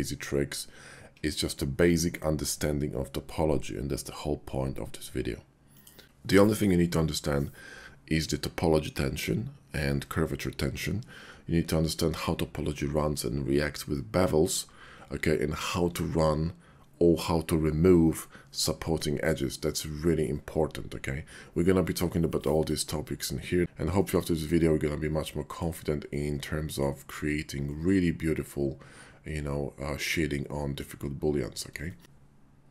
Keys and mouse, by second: 24.5-25.2 drag, 25.2 middle click, 26.0-26.7 middle drag, 27.7-30.8 middle drag, 31.9 shift+click.